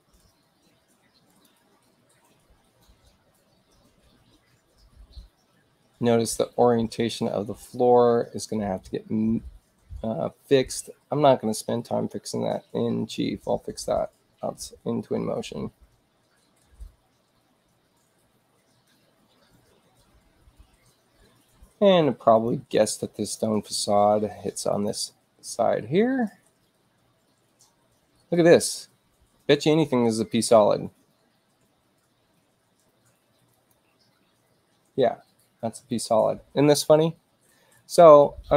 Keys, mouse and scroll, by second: 1.2 click, 22.3 click, 23.1 click, 24.6 click, 29.5 space, 30.1 click, 33.5 click, 35.8 click.